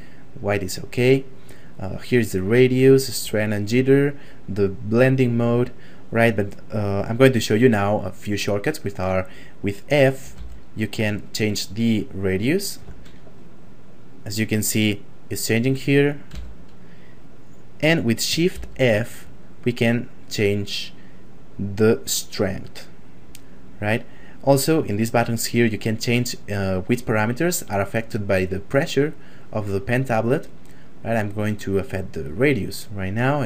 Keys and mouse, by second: 4.6 click, 10.4 f, 13.7 middle click, 14.2 right click, 17.6 right click, 18.6 shift+f, 22.2 right click, 24.4 click, 29.3 click.